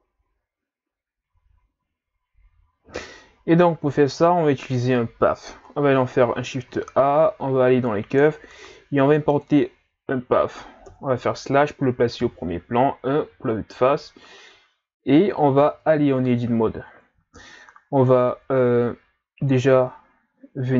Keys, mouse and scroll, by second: 0.7-1.2 scroll up 3, 6.7 shift+a, 10.9 KP_Divide, 12.2 KP_1, 15.7 Tab, 16.2 scroll down 1, 16.8-17.2 ctrl+scroll down 2, 18.1-18.5 ctrl+scroll up 2.